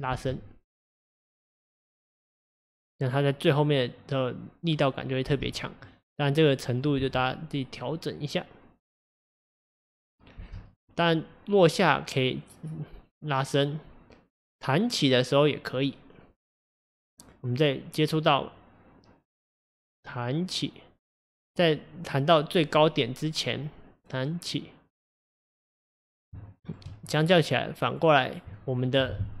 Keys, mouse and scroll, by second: 0.1 space, 5.3 space, 5.9 click, 7.0 space, 10.4 space, 10.8 click, 26.5-26.9 shift+middle drag, 26.9-28.0 scroll up 4, 28.0 click, 28.5-29.4 shift+middle drag.